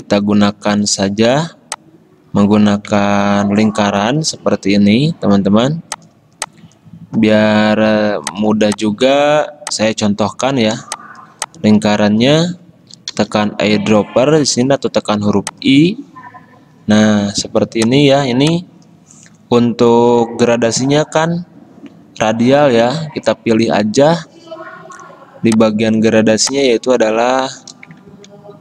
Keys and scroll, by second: 4.9-6.1 typing, 13.2 typing, 17.6 v, 28.2 ctrl+z.